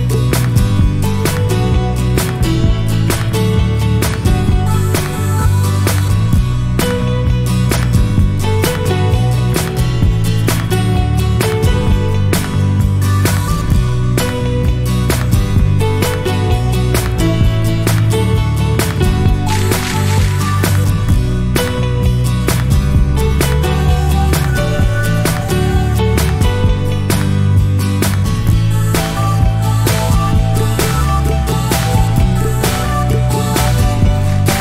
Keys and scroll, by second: 18.8 0, 20.3 1, 26.1-26.5 typing, 28.9-29.3 typing.